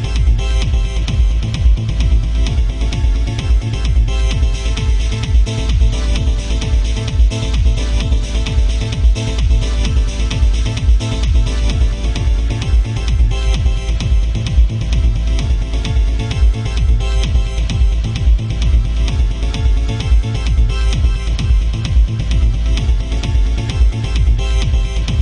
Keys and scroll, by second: 3.1 ctrl+z, 4.9 ctrl+z, 7.8 ctrl+z, 9.5 ctrl+z, 12.9 ctrl+z, 15.5 alt+space, 20.3 ctrl+z, 22.6 ctrl+z, 23.5 ctrl+z, 24.3 ctrl+z, 24.7 ctrl+z.